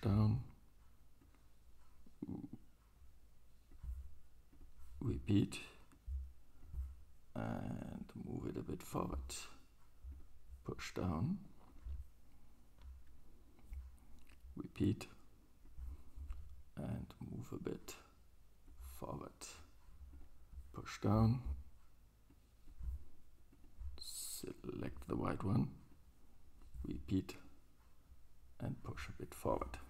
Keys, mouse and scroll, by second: 4.7-5.9 right drag, 11.7 click, 11.7-17.7 right drag, 14.9-17.7 drag, 23.7-24.5 right drag, 24.6-29.7 right drag, 26.0-29.7 drag, 29.8 drag, 29.8 right drag.